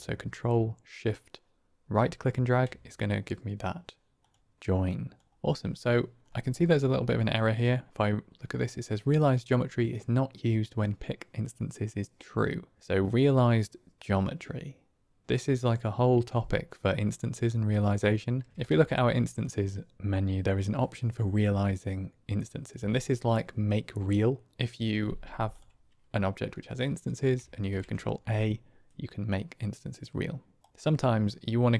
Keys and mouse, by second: 1.1-2.4 ctrl+shift+drag, 4.1 click, 4.8 click, 13.0 click, 17.7 middle click, 18.6 shift+a, 25.4 click, 27.4 ctrl+a.